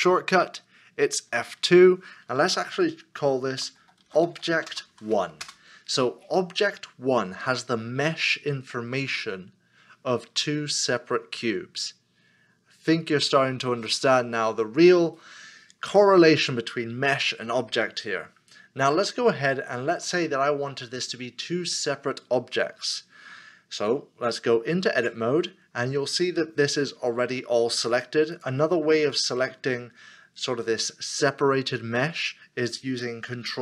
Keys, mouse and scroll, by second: 1.3 F2, 3.5-5.4 typing, 20.1 middle click, 21.3 scroll up 1, 22.2-22.5 scroll down 1, 25.0 Tab, 26.8 middle click, 31.2 middle click.